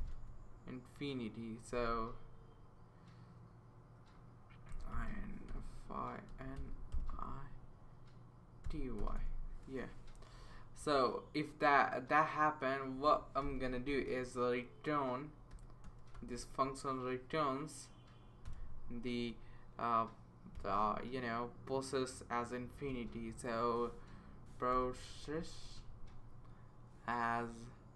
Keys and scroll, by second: 0.0-0.5 typing, 1.5-2.2 typing, 4.4-9.7 typing, 10.8 Right, 12.9 space, 13.4 shift+[, 13.9 Return, 15.3-16.6 typing, 18.4 Return, 20.5 ', 22.5-23.4 typing, 24.5-26.1 typing, 27.5 space.